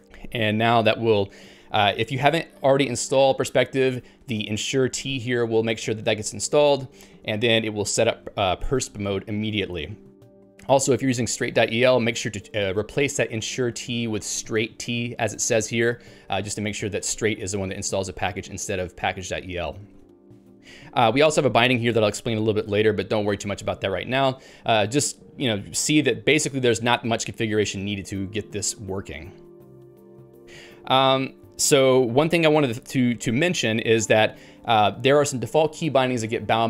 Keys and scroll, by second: 5.1 Down, 8.1 Down, 8.3 Down, 8.5 Down, 10.1 Up, 10.3 Up, 10.5 Up, 10.7-11.9 Right, 12.1 Right, 14.1 Right, 14.9 Right, 15.1 Right, 15.3 Right, 15.5 Right, 15.7 Right, 19.7 Down, 19.9 Down, 20.1 Down, 20.7 Down, 21.1 Up, 21.3 Up, 23.3 Down, 23.5 Down, 23.7 Down.